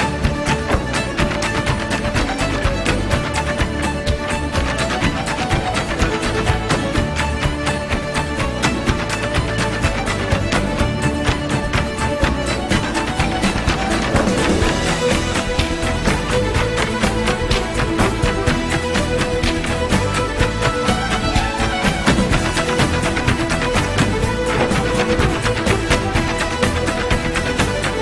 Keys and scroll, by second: 10.5-11.3 typing.